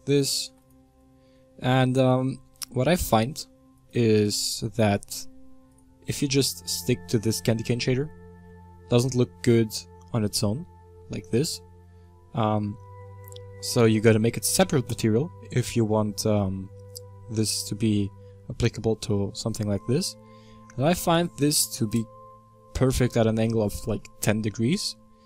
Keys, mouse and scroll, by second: 0.6 w, 4.4 click, 6.8-7.2 drag, 7.2-14.9 middle drag, 14.9 click, 15.4-22.0 shift+middle drag, 22.0-22.8 drag, 22.8-24.7 middle drag, 24.7-25.2 scroll up 1.